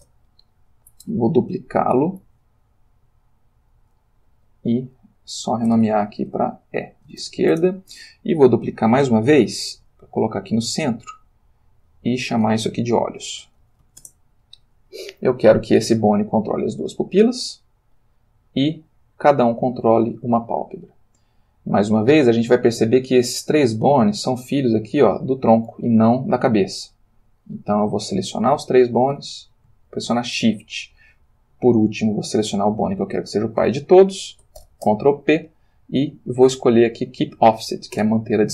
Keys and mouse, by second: 0.0 Return, 2.2 shift+d, 3.7 click, 4.4 F2, 5.4 End, 5.7 BackSpace, 7.2 shift+e, 7.5 shift+Return, 9.7 shift+d, 11.2 click, 12.0 F2, 13.2 shift+o, 13.4 shift+l, 13.6 shift+h, 13.8 shift+s, 14.0 shift+Return, 15.9 click, 16.2 g, 17.8 click, 18.5 click, 19.6 click, 27.4-28.6 drag, 29.7 space, 31.3 shift+click, 34.6 ctrl+p, 37.9 Return.